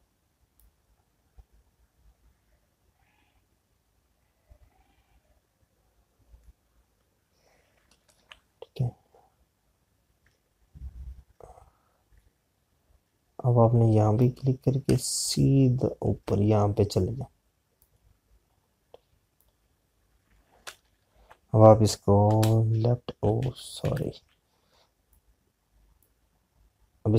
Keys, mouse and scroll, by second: 2.7 alt+click, 15.0 click, 23.2 Left, 24.5 ctrl+z.